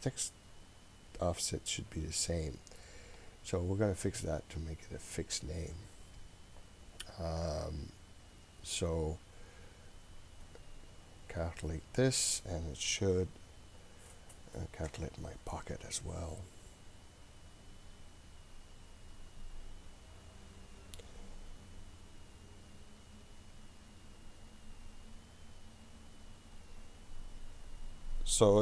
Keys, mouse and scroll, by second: 3.2 click, 10.5 click, 11.4-28.5 drag.